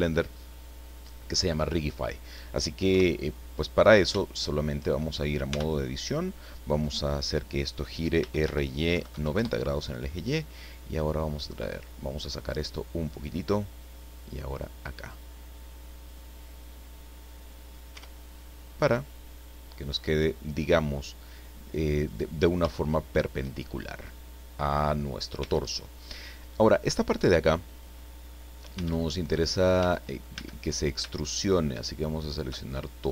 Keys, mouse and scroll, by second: 2.9 KP_1, 5.5 Tab, 8.2 r, 8.9 KP_9, 9.1 KP_0, 9.3 KP_Enter, 11.6-13.3 drag, 13.6-15.2 drag, 16.0-17.9 drag, 17.9 Tab, 18.5-22.2 middle drag, 22.3-23.0 scroll up 3, 22.8 shift+middle click, 23.0 shift+middle click, 23.9-24.2 shift+scroll down 3, 25.4 Tab, 25.8-26.2 scroll up 1, 26.7-27.0 scroll down 2, 27.6 scroll up 2, 28.7 Tab, 29.8 Tab, 30.3 a, 31.8 alt+shift+right click, 33.0 scroll down 1.